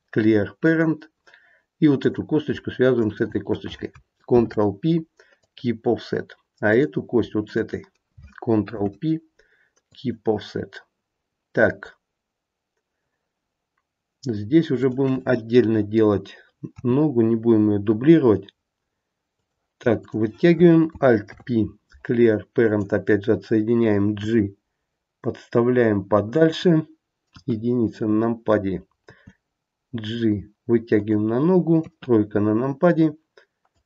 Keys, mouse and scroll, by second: 1.9 click, 3.0 shift+click, 4.2 ctrl+p, 6.6 click, 7.3 shift+click, 8.6 ctrl+p, 11.2-12.3 scroll down 2, 14.8 click, 16.8 e, 20.0 click, 21.2 alt+p, 24.2 g, 27.3 KP_1, 29.0 g, 31.8 KP_3, 33.6 click.